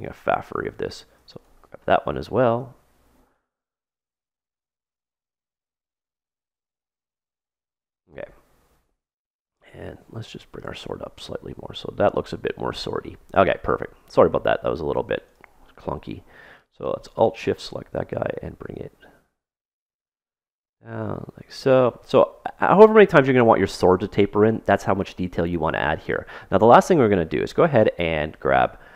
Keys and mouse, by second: 1.3 right click, 4.3-6.7 middle drag, 6.7 click, 6.7 right click, 9.2-10.9 drag, 11.2-13.2 middle drag, 15.3-18.6 right drag, 18.1-19.8 drag, 20.4-22.3 middle drag, 26.4-28.9 middle drag.